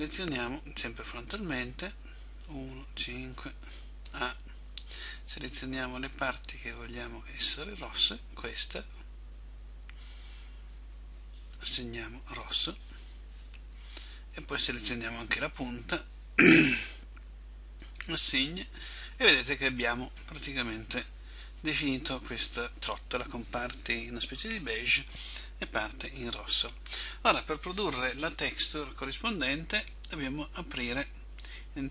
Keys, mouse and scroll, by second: 1.4 KP_5, 2.4 KP_1, 2.9 KP_5, 4.2 a, 5.0 b, 12.5 click, 13.8 b, 18.0 click, 31.6 click.